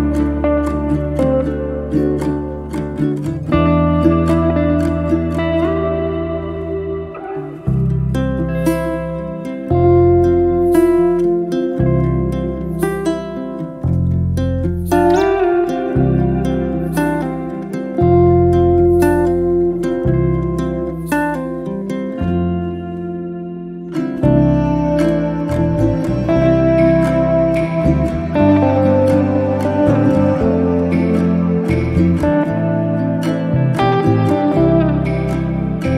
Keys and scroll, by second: 9.2 space, 9.4 5, 10.1 Return.